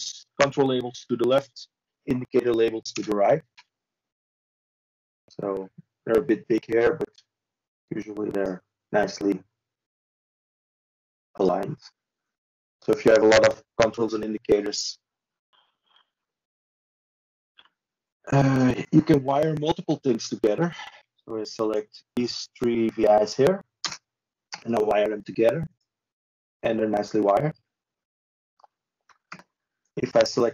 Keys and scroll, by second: 1.4 ctrl+z, 19.5 ctrl+c, 22.1 ctrl+space, 26.9 ctrl+i.